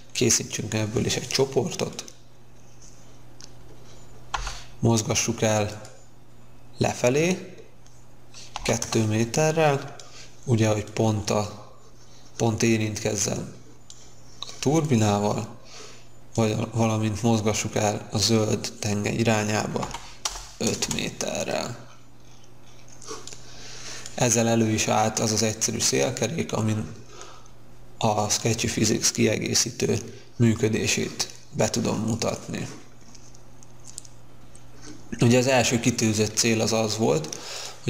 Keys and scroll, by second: 4.3 m, 8.5 2, 8.9 Return, 9.7 Return, 19.8 5, 20.2 Return, 20.8 space.